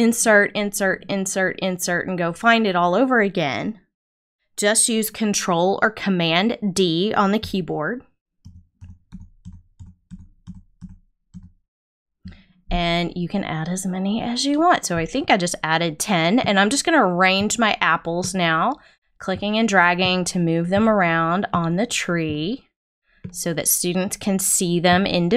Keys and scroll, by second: 8.4 super+d.